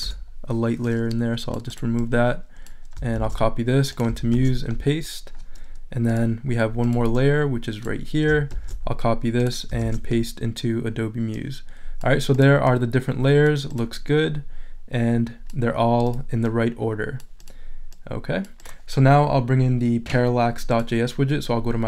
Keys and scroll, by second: 0.0 BackSpace, 3.1 super+c, 4.3 super+v, 8.5 super+c, 9.8 super+v.